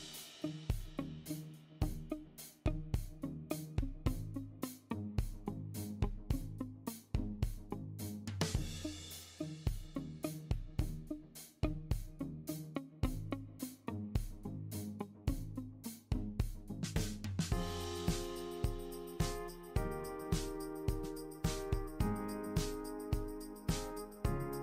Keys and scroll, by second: 4.3 super+d, 18.2 super+c, 18.4 super+v.